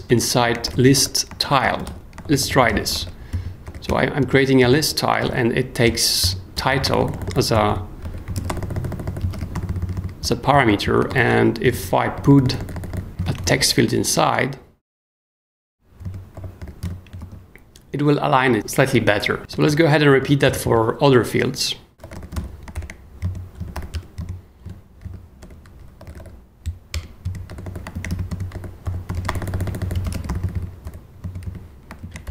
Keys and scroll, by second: 0.0-13.7 typing, 4.3 super+Escape, 5.8 Return, 11.6 shift+super+j, 11.7 shift+super+s, 12.1 super+j, 16.1-17.3 typing, 19.5 super+j, 20.4 k, 21.7-23.7 typing, 23.6 shift+super+l, 23.9 Return, 24.6 super+l, 25.0-26.7 typing, 26.9 Return, 27.5 super+j, 27.7-30.8 typing, 31.4 super+k, 32.0-32.3 typing.